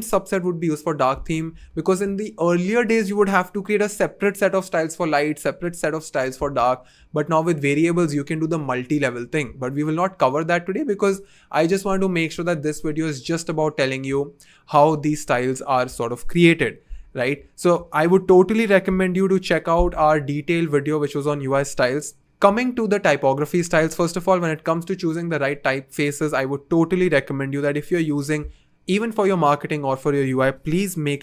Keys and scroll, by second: 3.2 BackSpace.